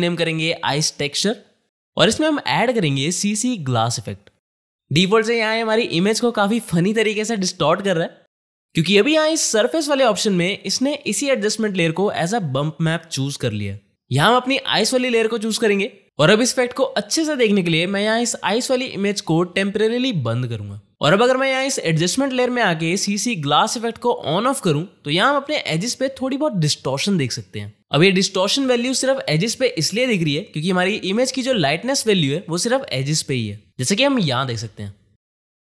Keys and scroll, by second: 0.0-4.0 typing.